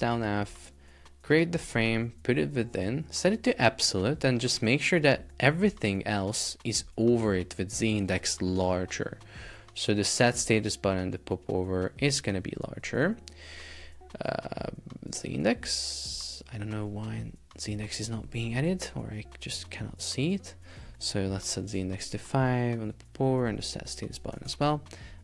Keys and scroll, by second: 0.0 super+x, 1.8 super+v, 8.2 super+z, 22.1 Return, 24.3 Return, 24.5 super+Tab.